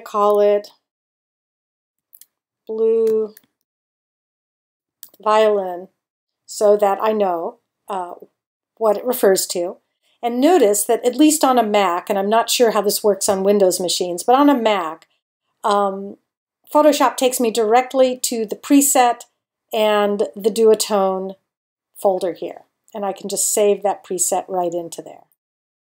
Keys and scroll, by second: 0.8-5.5 typing.